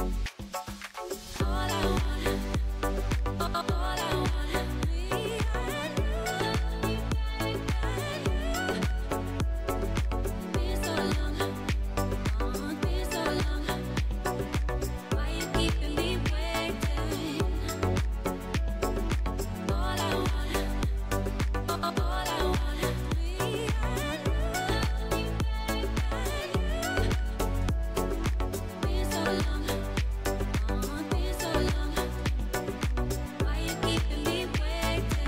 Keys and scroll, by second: 2.5 Tab, 5.1 Tab, 6.0 1, 9.4 Tab, 11.9 Tab, 12.8 shift+z, 16.7 Tab, 17.6 Tab, 19.6 Tab, 20.4 Tab, 21.6 alt+e, 26.8 alt+s, 31.1 ctrl+z, 32.2 Tab, 33.4 alt+e.